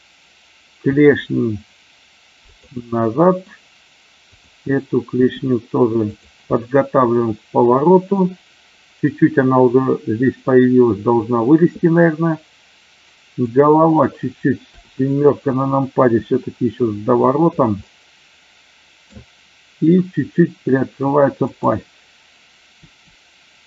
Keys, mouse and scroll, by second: 2.4 click, 2.8-3.3 middle drag, 6.1 click, 6.4-8.2 middle drag, 13.3 click, 16.0 r, 17.0 click, 17.8-19.0 middle drag, 21.3 click, 22.8 r.